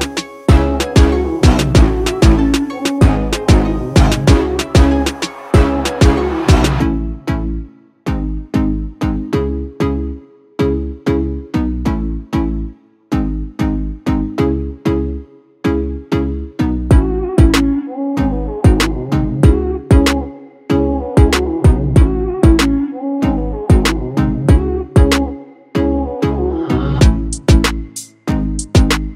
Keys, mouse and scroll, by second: 4.4 click, 8.2-26.4 drag, 26.4 ctrl+t, 28.1-29.1 alt+drag.